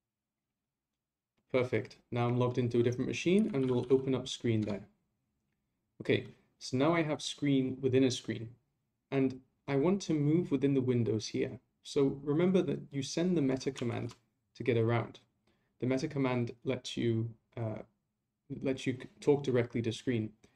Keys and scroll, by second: 13.9 ctrl+c.